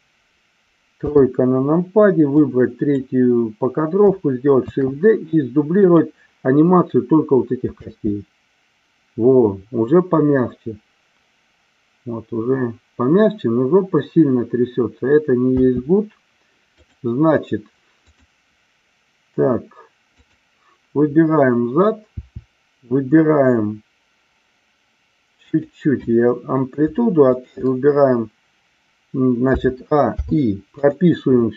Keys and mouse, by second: 1.0 KP_3, 2.4 click, 4.6 shift+d, 5.8 click, 7.7 space, 15.6 space, 16.7 click, 18.0 click, 20.1 click, 22.0 r, 25.5 click, 27.3 shift+click, 29.4 a, 30.0 i.